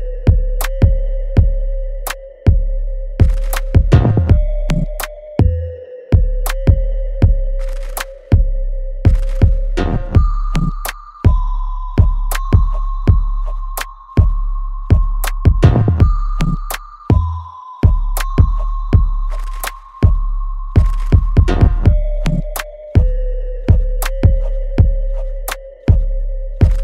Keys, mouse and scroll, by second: 2.4 click, 4.4 alt+right click, 5.1 alt+click, 5.8 right click, 5.8-7.1 alt+right drag, 7.1-9.8 drag, 9.8-11.9 ctrl+drag, 11.9 right click, 13.3 click, 13.5-15.9 alt+drag, 15.9 alt+right click, 16.9 alt+middle click, 17.6 alt+right click, 18.1-22.0 alt+drag, 22.0 alt+middle click, 22.5 alt+click, 23.0 alt+right click, 23.6 alt+middle click, 24.1-26.1 alt+right drag, 26.1-26.8 alt+drag.